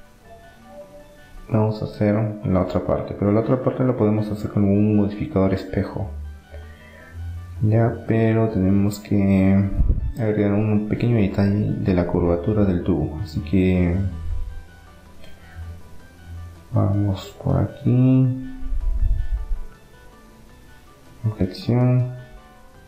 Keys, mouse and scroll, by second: 0.9-2.5 drag, 4.2-6.2 middle drag, 10.9-12.7 drag, 12.7 Tab, 13.2-14.9 middle drag, 14.2 a, 15.3 a, 15.9 a, 17.3-20.2 drag.